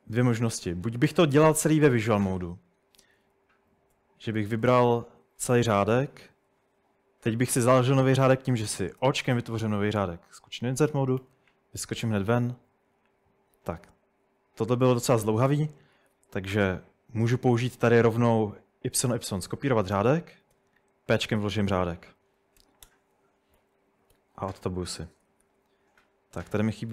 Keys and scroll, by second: 3.2-5.9 typing, 9.0 o, 11.2 Escape, 12.3 p, 15.5 typing, 18.9-20.6 typing, 22.6 typing, 22.9 Tab, 24.1 Escape, 25.2-26.9 typing.